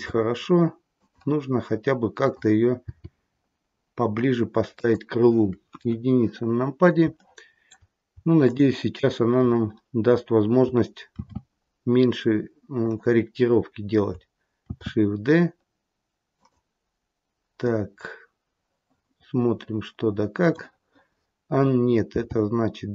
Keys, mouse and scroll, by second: 1.4-2.1 scroll down 1, 2.1 click, 2.8 g, 5.6 KP_1, 7.1 shift+middle click, 8.3 shift+click, 11.1 shift+d, 14.6 shift+d, 17.6 middle click, 22.0 g.